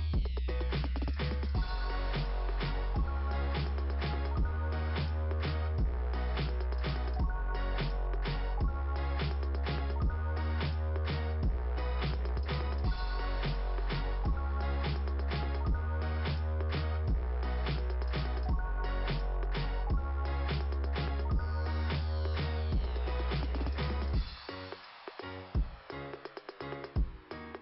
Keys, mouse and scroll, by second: 0.9 click, 3.1 click, 4.3 click, 4.5 click, 4.7 double click, 5.3 double click, 6.2-9.3 typing, 9.1 click, 10.7 click, 13.9 click, 14.0 click, 17.2 click, 20.4 click, 20.5 click, 21.2 click, 21.9 click, 22.5 click, 23.0 click, 24.8 click, 25.0 click, 25.1 click, 26.4 click, 26.8 click, 27.0 click, 27.1 click.